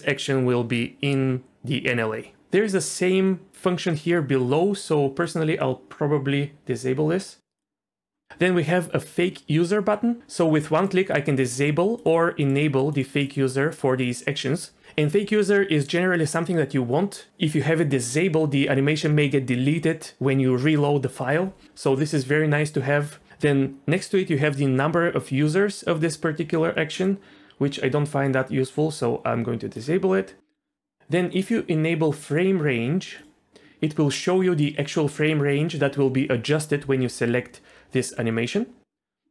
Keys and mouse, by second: 5.2-8.2 drag, 10.8 click, 11.3 click, 12.0 click, 12.4 click, 12.9 click, 13.2 click, 27.0-30.4 drag, 31.3-33.5 drag, 38.1 click.